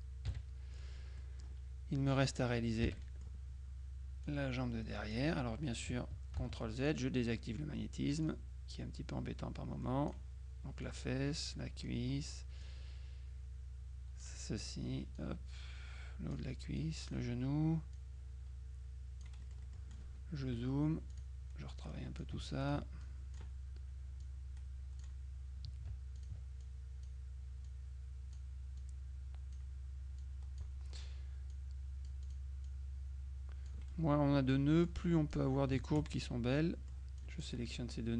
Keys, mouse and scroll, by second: 0.4 KP_Subtract, 1.3 middle click, 2.9 F6, 3.1 middle click, 4.3-5.7 drag, 6.5 ctrl+z, 6.9 ctrl+click, 8.3-10.7 drag, 10.9-12.8 drag, 15.3-16.9 drag, 18.0-20.5 drag, 19.5-20.5 right drag, 20.5 F2, 21.2 click, 21.9 click, 23.1 ctrl+click, 24.3 click, 26.3 ctrl+click, 27.7 click, 30.3 click, 31.6 click, 34.9 click, 36.3 shift+click, 37.3 click.